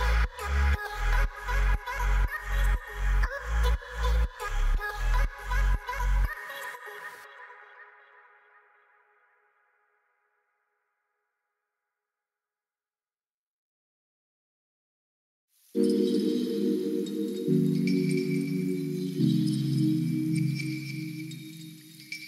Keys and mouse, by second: 0.6-2.2 drag, 2.7 middle click, 3.2 Tab, 3.7 middle click, 5.1 ctrl+s, 5.5 middle drag, 6.0 KP_Divide, 8.1 middle drag, 9.4 shift+middle click, 9.4 ctrl+shift+s, 11.0 middle click, 11.3 shift+middle click, 12.4 click, 12.9 KP_0, 13.7 shift+middle click, 14.6 shift+middle drag, 16.6 click, 19.0-22.2 drag, 21.8 o.